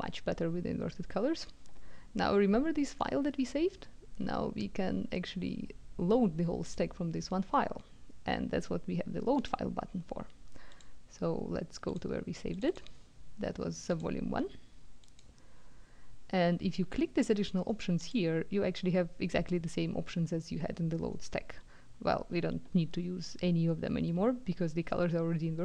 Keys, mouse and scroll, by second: 6.7 click, 9.4 click, 10.7 click, 11.9 click, 12.5 click, 13.9 click, 15.0 click, 18.0 click.